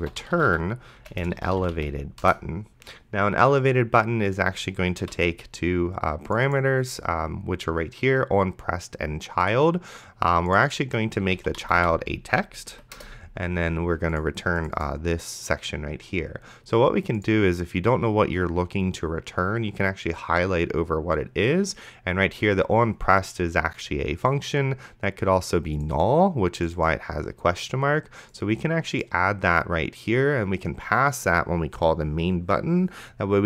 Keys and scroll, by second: 0.0-2.3 typing, 5.0 ;, 11.2-12.3 typing, 12.7 Down, 13.0 Return.